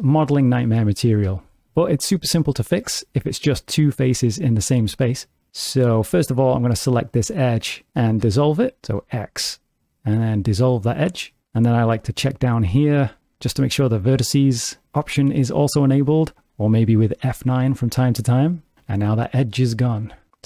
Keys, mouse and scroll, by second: 0.5 2, 1.3 shift+middle click, 6.7 click, 8.9 x, 12.4 click, 15.9 click, 17.1 F9.